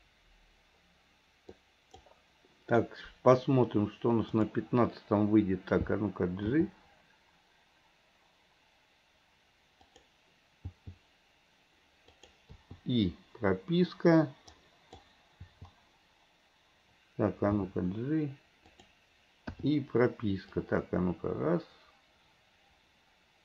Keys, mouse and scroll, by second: 1.6-2.1 drag, 4.5 click, 6.6 g, 10.6 g, 12.6 i, 14.6-15.1 drag, 15.5 i, 17.6 g, 19.6 i, 20.6-23.4 drag.